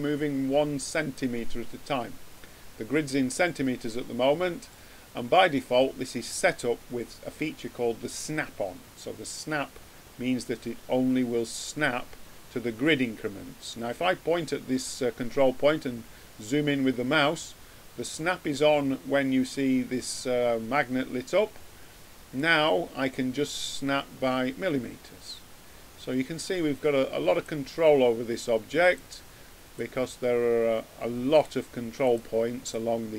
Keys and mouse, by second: 3.9-8.6 middle drag, 15.3-19.2 middle drag, 22.3-24.1 drag, 28.7-31.4 drag, 32.0-33.1 drag.